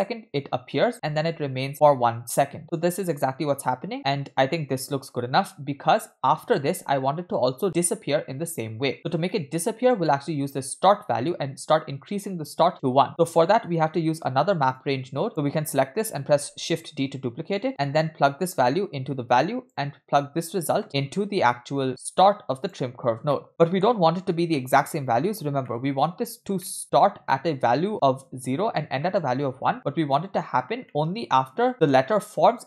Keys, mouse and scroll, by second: 1.2 space, 5.9-6.6 scroll down 1, 6.6 scroll down 1, 6.7 space, 9.1 scroll down 2, 9.3 middle click, 11.3-13.1 drag, 13.5 middle click, 13.9-14.7 scroll down 1, 14.8-15.3 drag, 15.3 middle click, 16.5 shift+d, 18.6-19.8 drag, 20.6-22.7 drag, 23.3 middle click, 23.5-24.4 scroll up 5, 23.6 middle click, 24.6 middle click, 25.7 middle click, 26.6 middle click, 30.9 middle click.